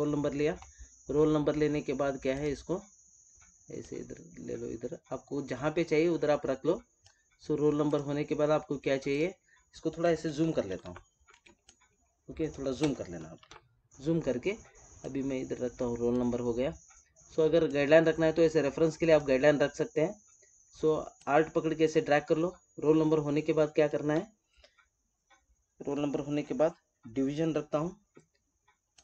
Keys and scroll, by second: 10.2 ctrl+=, 11.4 space.